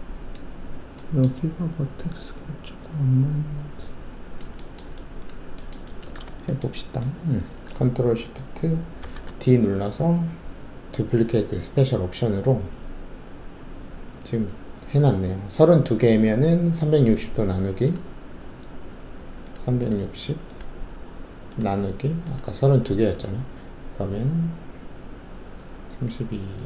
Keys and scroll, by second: 6.1 w, 9.0 ctrl+shift+d.